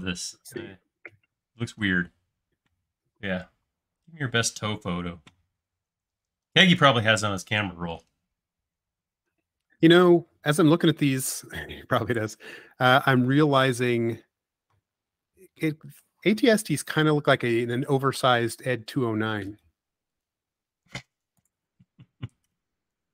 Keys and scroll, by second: 11.8 m, 14.5 space.